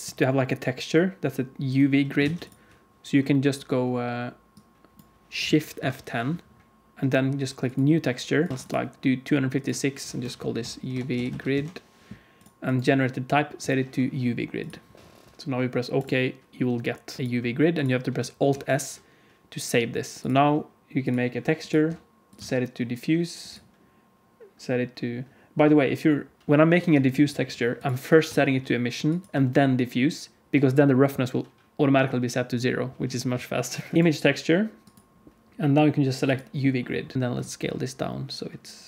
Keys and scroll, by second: 2.1 alt+a, 2.1 ctrl+s, 2.1 alt+a, 5.7 shift+F10, 17.2 alt+a, 18.5 alt+s, 20.2 alt+a, 37.1 s.